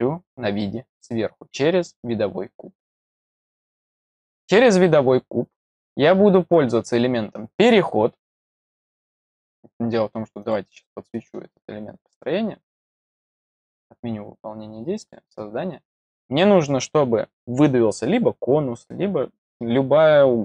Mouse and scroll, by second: 3.4-4.6 scroll up 5, 8.6 click, 10.3 click, 13.2 click, 14.9 click.